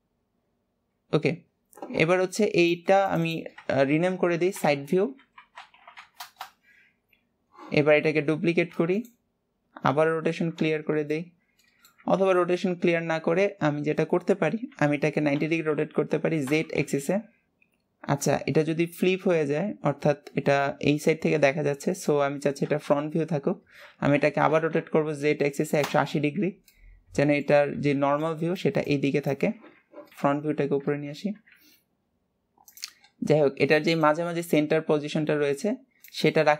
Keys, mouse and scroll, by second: 0.4 scroll down 3, 1.1 scroll up 1, 8.6 shift+d, 9.7 scroll down 1, 9.8 scroll up 1, 9.9 scroll down 1, 11.2-12.3 middle drag, 12.3 ctrl+z, 17.5-19.7 middle drag, 26.8-29.9 middle drag, 31.3 scroll down 2, 31.5 g, 33.2 scroll up 2.